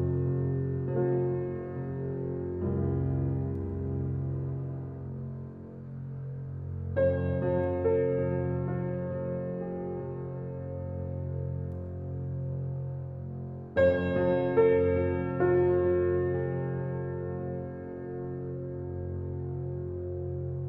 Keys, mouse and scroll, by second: 0.9 click, 3.0 ctrl+click, 6.5-9.3 drag, 10.3 click, 15.4 click, 16.6-20.6 drag.